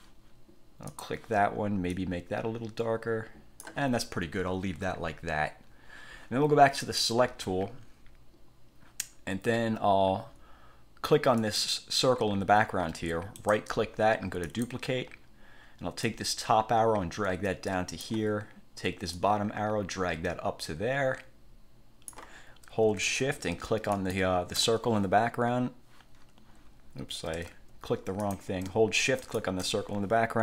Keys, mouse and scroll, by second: 1.1 click, 2.1 click, 6.9 click, 11.5 click, 13.5-13.8 scroll up 1, 14.6 click, 16.2-18.3 drag, 19.3-22.4 drag, 23.2 Caps_Lock, 24.1 click, 27.5 Caps_Lock, 28.3 click, 29.3 shift+click.